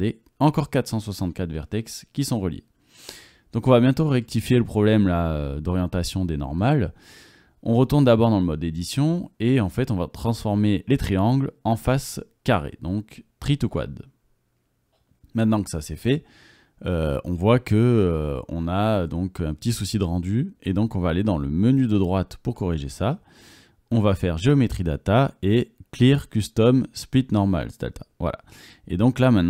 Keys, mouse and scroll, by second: 2.8-4.3 drag, 3.5 Tab, 3.5 Tab, 4.4 click, 5.3 drag, 5.6-6.2 drag, 7.6 click, 8.0 Tab, 9.4 a, 9.5 3, 15.1 Tab, 17.9 click, 21.9 click, 22.8 click, 24.4 click, 28.9 Tab.